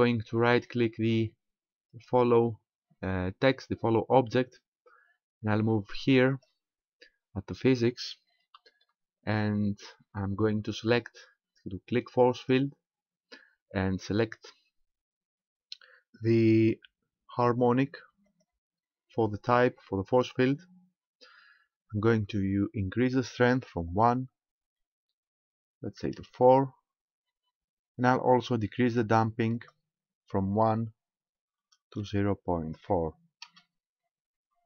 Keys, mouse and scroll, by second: 0.1-0.5 scroll up 4, 1.9 right click, 6.3 click, 8.9 shift+middle click, 9.8-10.4 scroll up 3, 12.3 click, 14.2 click, 23.9 click, 29.5 click.